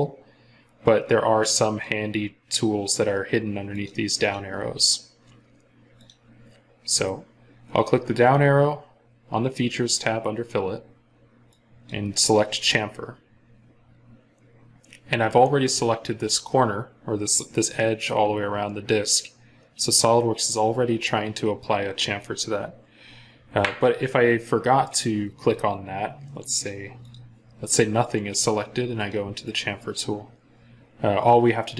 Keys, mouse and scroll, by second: 4.0 double click, 20.0-21.0 scroll down 1, 26.9 double click.